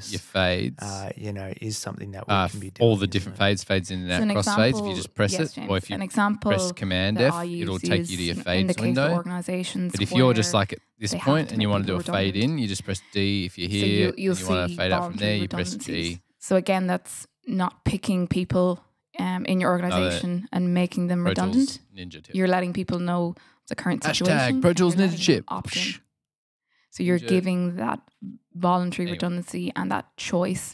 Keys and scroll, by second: 1.8 super+f, 7.6 super+f, 12.5 d, 14.7 g, 15.9 super+z, 16.1 super+z, 18.4 F8, 20.9 F7.